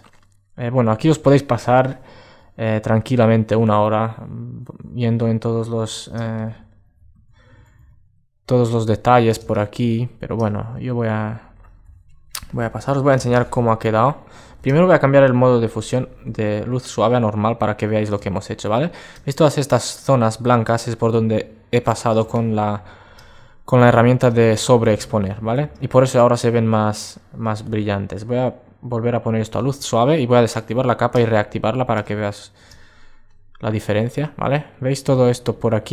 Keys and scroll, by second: 5.9 super+space, 11.8 alt+space, 31.1 alt+space.